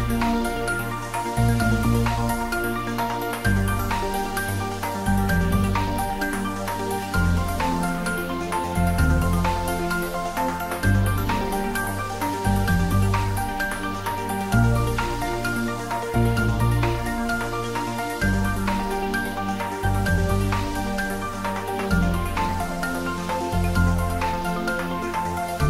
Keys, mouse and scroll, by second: 0.2-1.0 scroll up 1, 1.0 scroll down 1, 2.9 shift+d, 3.3 r, 4.6 click, 5.3 g, 6.9 click, 7.4-8.4 scroll up 1, 8.4-9.3 middle drag, 10.1-11.0 scroll up 1, 12.5 click, 13.5-14.2 scroll up 1, 15.3 click, 19.4 click, 22.1 scroll up 1, 23.2-23.9 click, 24.4-25.6 drag.